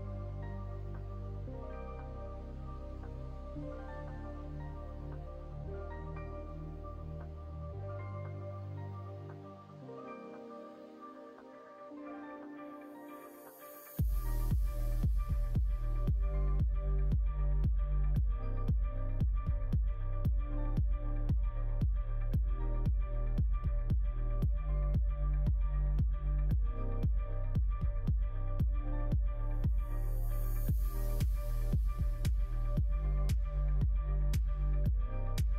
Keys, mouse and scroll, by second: 1.5-6.9 middle drag, 7.2 shift+middle click, 7.6-11.7 middle drag, 12.0 shift+middle click, 12.7 middle click, 13.1 middle click, 14.9 click, 15.5-19.2 middle drag, 19.7 middle click, 20.1 shift+middle click, 20.9 middle click, 21.3 shift+middle click, 21.7 middle click, 23.4 click, 24.7 click, 25.0 click, 25.5 middle click, 26.0 alt+z, 26.4 middle click, 29.5 click, 30.3 click, 30.7 middle click, 31.0 alt+z, 31.3 middle click, 32.9 middle click, 33.6 middle click, 34.2 shift+a.